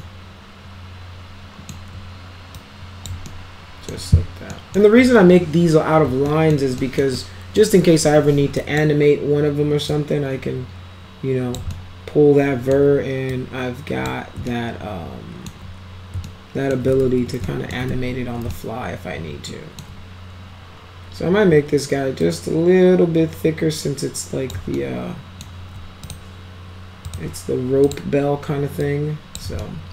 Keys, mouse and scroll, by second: 0.0-1.7 alt+middle drag, 2.6 click, 3.3 alt+middle click, 4.5 alt+middle click, 6.3 alt+middle click, 6.8 alt+middle click, 7.2 alt+middle click, 8.1 1, 8.6 click, 9.9-11.6 drag, 11.7-12.7 alt+middle drag, 13.3 click, 14.5 alt+right click, 16.3-16.7 alt+middle drag, 17.0 ctrl+z, 17.4 alt+middle drag, 17.9 ctrl+z, 18.5-19.8 alt+middle drag, 22.2-24.5 drag, 24.7-25.4 alt+middle drag, 26.1 click, 27.0 click, 27.8 click, 28.8 click, 29.6-29.9 alt+middle drag.